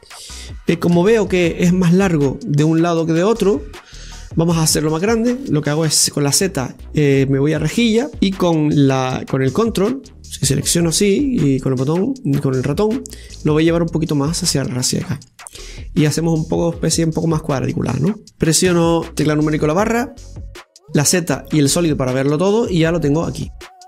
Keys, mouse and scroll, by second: 1.8 KP_7, 8.5-10.8 right drag, 10.8 ctrl+click, 14.2-16.4 drag, 16.4-19.1 middle drag, 19.1 KP_Divide, 20.1 Tab, 20.7-21.6 scroll up 1, 21.6 z, 23.1-23.6 middle drag, 23.6-23.8 right drag.